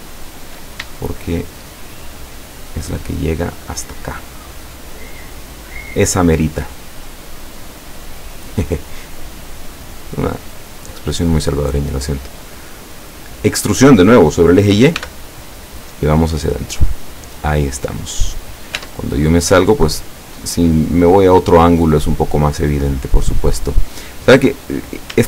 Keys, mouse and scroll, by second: 1.5 shift+right click, 2.6 shift+right click, 4.0 shift+right click, 5.3 shift+right click, 6.2-7.3 shift+middle drag, 9.1 shift+right click, 9.5 shift+right click, 10.5 shift+right click, 11.1 shift+right click, 11.6 shift+scroll down 1, 12.5-13.6 middle drag, 15.0 e, 17.0 click, 17.5-17.9 scroll down 1, 18.2-18.9 middle drag, 18.8 Tab, 19.4-24.3 middle drag, 24.4-24.8 scroll up 1, 25.1 Tab.